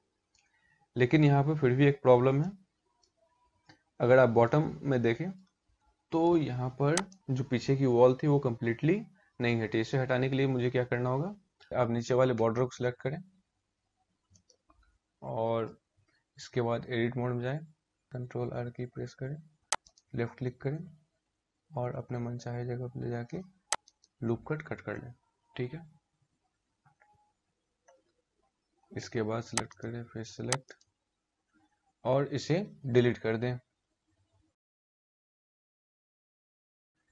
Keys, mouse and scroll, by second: 1.9 middle click, 2.8-3.3 scroll up 5, 4.0 middle click, 5.7 shift+middle click, 6.6 click, 10.8-11.6 scroll down 2, 11.6 scroll down 2, 11.6 a, 13.8 shift+middle click, 14.4 scroll up 2, 16.3 Tab, 18.2 ctrl+r, 29.3 click, 30.3 click, 33.6 Delete.